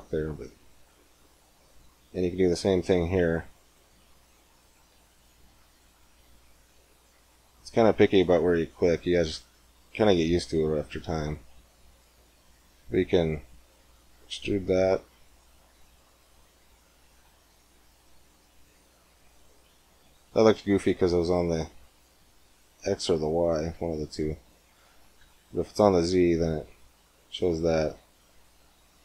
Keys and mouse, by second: 1.6-3.5 drag, 3.5-10.9 right drag, 10.9 middle click, 11.8-13.5 middle drag, 13.5 e, 26.6-28.2 middle drag, 28.3-29.0 middle drag.